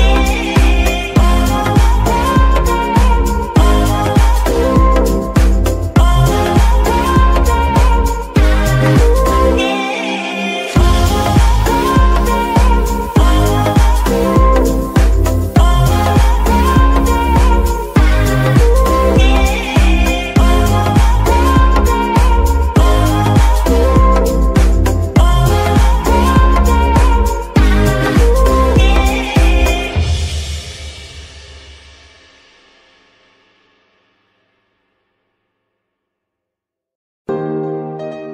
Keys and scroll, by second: 15.2-16.1 typing, 17.4 g, 18.9 shift+s, 21.4 KP_3, 22.7 shift+r, 23.6 KP_Subtract, 23.8 KP_9, 23.9 KP_0, 24.2 Return, 25.8 g, 25.9 y, 32.6 a.